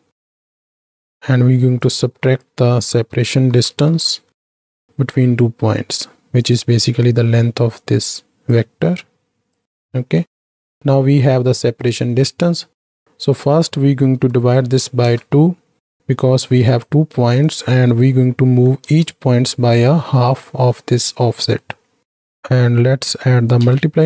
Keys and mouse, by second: 1.9-6.5 drag, 7.8 click, 9.6 drag, 9.9 middle click, 10.7 middle click, 11.1 click, 12.9 click, 13.1-16.7 drag, 17.5-18.8 drag, 20.0 middle click, 21.3 middle click, 22.0-24.0 drag.